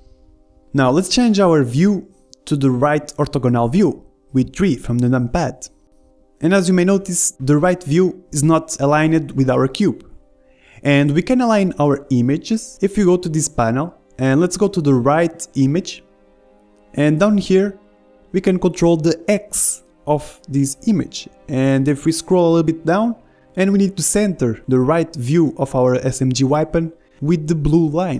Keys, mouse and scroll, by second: 2.6-5.8 middle drag, 5.9 middle click, 6.2 KP_3, 7.7-12.7 middle drag, 11.2 ctrl+z, 14.2-16.1 drag, 18.6-20.6 drag, 22.7-26.6 drag, 24.4 middle click, 25.1 right click, 25.3 right click, 25.6-27.6 middle drag, 27.6-28.1 drag.